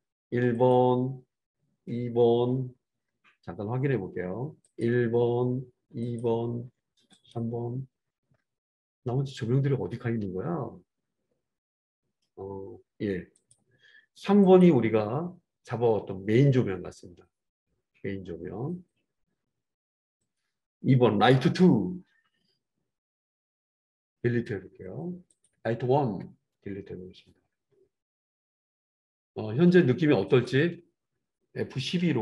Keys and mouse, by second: 0.6 click, 0.8-6.1 middle drag, 6.1 click, 6.2-7.2 middle drag, 7.2 click, 7.6-13.3 middle drag, 13.3 click, 13.4-14.5 middle drag, 14.5 click, 14.6-20.2 middle drag, 20.2 click, 20.3-25.4 middle drag, 24.5 Delete, 25.4 click, 26.2 Delete, 26.2-30.2 middle drag, 30.2 click, 30.6-32.1 middle drag.